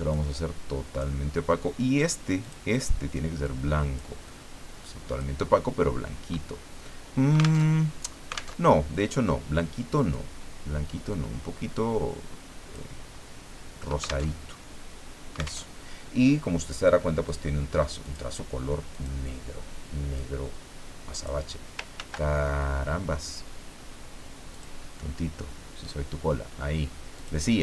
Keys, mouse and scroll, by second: 0.1-1.4 drag, 2.4 click, 3.4 click, 4.2-5.4 drag, 7.6 alt+Tab, 8.6 alt+Tab, 10.1-13.0 drag, 14.2 alt+Tab, 15.6 alt+Tab, 17.2 click, 18.0 click, 18.9 click, 20.1-21.4 drag, 21.9 ctrl+z, 24.5 click, 27.1 click.